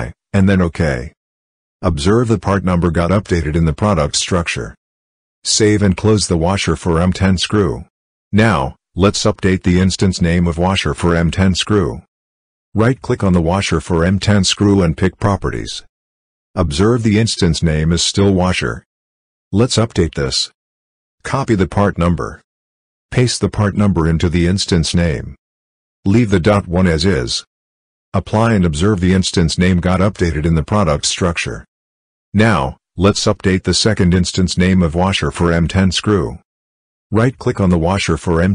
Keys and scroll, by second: 5.7 ctrl+s, 22.6 ctrl+c, 25.2 ctrl+v.